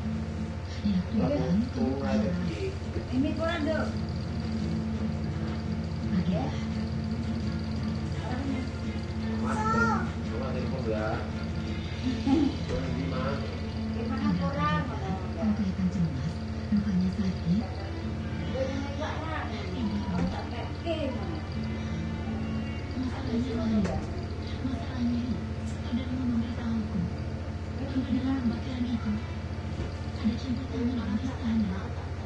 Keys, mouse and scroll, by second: 0.8 shift+click, 1.7 click, 4.5 click, 6.6 click, 7.7 click, 8.7 click, 10.0-11.4 drag, 12.2 4, 12.8 Return, 14.7 click, 15.8 click, 17.3 click, 19.9 9, 20.3 Return, 21.5 click, 23.4 5, 23.9 Return, 25.5 click, 26.7 click, 28.3 click, 30.2 click, 31.5 click.